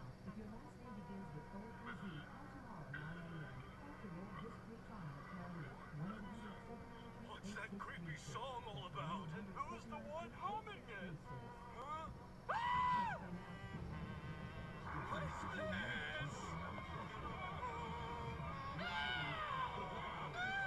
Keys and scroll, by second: 13.9 Return, 14.3 Delete.